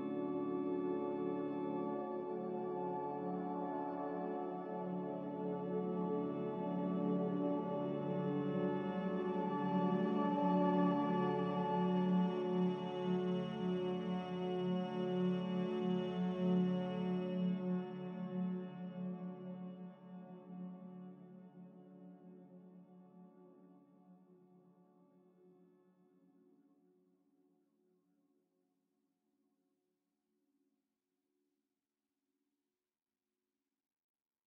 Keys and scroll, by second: 26.8 z, 33.0 typing.